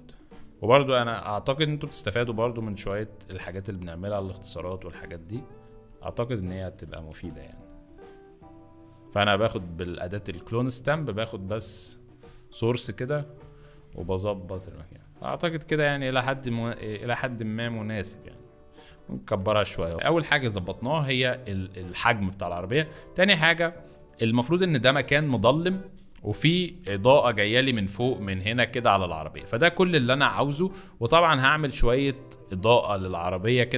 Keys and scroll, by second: 6.0 z, 6.6 s, 13.8 z, 19.9 z, 23.0 z, 27.2 F3.